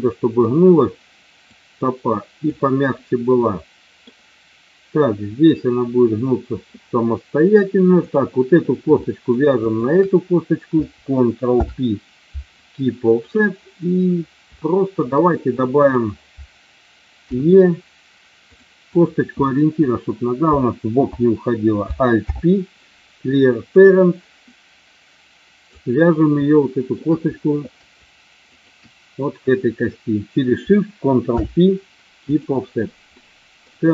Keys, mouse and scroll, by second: 0.0 middle click, 1.5 click, 2.9-4.1 middle drag, 8.9 shift+middle click, 9.7 shift+click, 11.6 ctrl+p, 14.7 shift+middle click, 15.7 click, 17.2 e, 18.5 click, 18.8 click, 22.2 alt+p, 24.5-25.6 drag, 26.6 shift+middle click, 28.5 shift+click, 31.2 ctrl+p, 33.1 middle click, 33.8 shift+middle click.